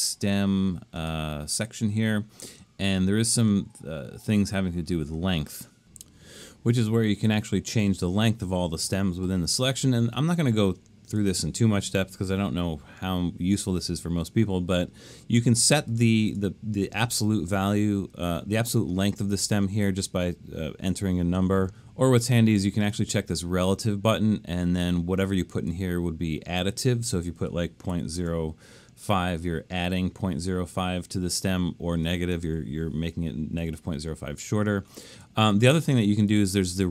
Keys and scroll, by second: 27.7-29.2 typing, 33.6 BackSpace.